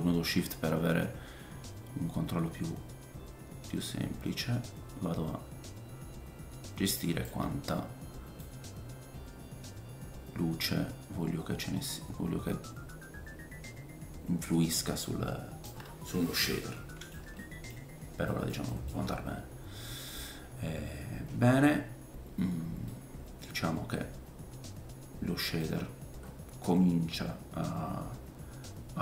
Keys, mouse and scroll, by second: 8.4 click, 17.4-22.2 middle drag, 17.7-18.3 scroll down 3, 18.9-20.2 scroll up 3, 22.9 middle click.